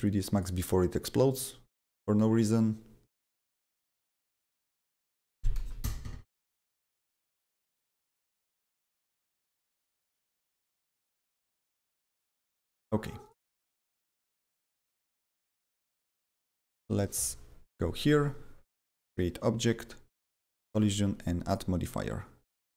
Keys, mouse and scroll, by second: 0.3 click, 3.1 click, 3.3 double click, 3.9 click, 4.9-5.9 typing, 8.1 click, 12.3 click, 13.2 click, 15.9 right click, 15.9 right click, 16.8 click, 19.0 click, 20.6 click, 21.5 click.